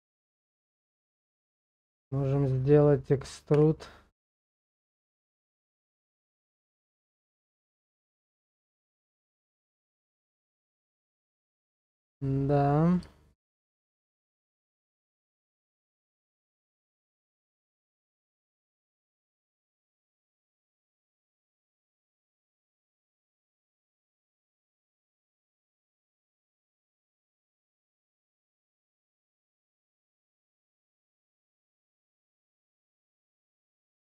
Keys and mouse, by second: 10.0-11.1 middle drag, 11.2 shift+middle click, 12.7 middle click, 13.1 shift+middle click, 13.6 Tab, 14.7 middle click, 17.7 shift+middle click, 18.2-19.7 middle drag, 20.8 KP_0, 24.1 shift+click, 26.3 click.